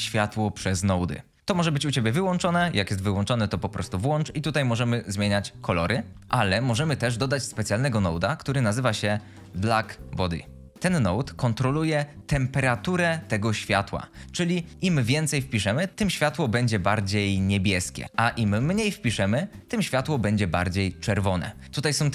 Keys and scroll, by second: 6.2 ctrl+z, 7.7 typing, 8.8-10.4 typing, 10.0 Return, 15.7-19.3 typing, 20.5-21.2 typing.